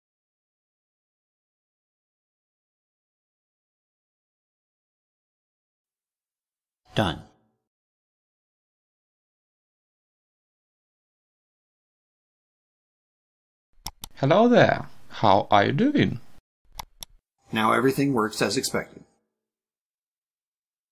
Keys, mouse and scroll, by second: 0.4-1.4 ctrl+middle drag, 2.2-3.3 drag, 3.8 click, 5.1 click, 7.2-7.7 ctrl+scroll down 2, 8.1 ctrl+middle click, 9.5-11.2 drag, 12.4-13.5 drag, 13.7 click, 16.8 click.